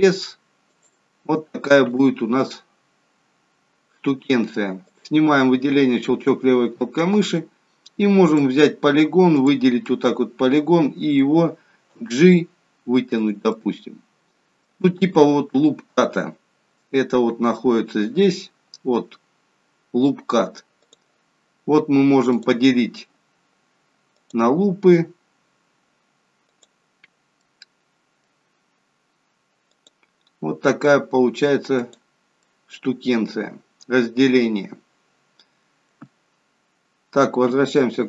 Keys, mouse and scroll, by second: 4.8 click, 6.0 middle click, 8.2 click, 9.3 click, 9.8 middle click, 11.9 g, 13.5 middle click, 15.5-16.7 scroll down 4, 17.1 scroll down 2, 17.7 scroll down 2, 22.4 click, 24.1 click, 26.4 click, 27.4 middle click, 29.7 click, 31.7 click, 32.4 middle click, 37.7 ctrl+z.